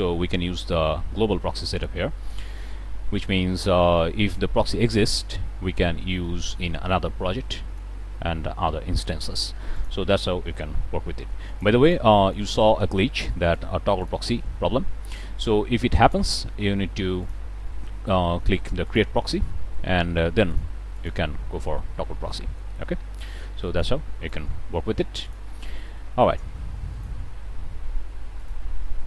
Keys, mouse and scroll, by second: 9.1 click, 10.8 g, 11.4-12.0 drag, 13.3 click, 13.9 click, 17.1 click, 18.7 click, 20.4 click, 20.8 click, 22.2 middle click, 23.7-24.4 drag, 25.1 click, 25.7 middle click, 26.8 click, 28.3 click.